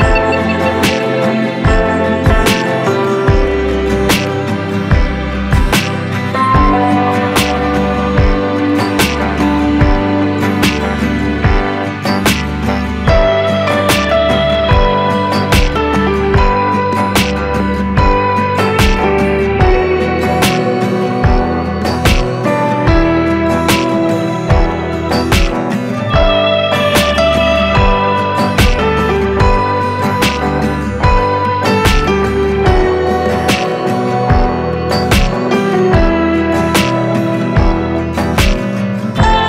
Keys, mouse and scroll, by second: 2.2 click, 5.1 ctrl+alt+scroll up 1, 14.6 ctrl+alt+scroll down 1, 17.1-20.3 drag, 20.3 ctrl+space, 22.5-25.3 drag, 25.3 Delete, 27.7-39.4 drag.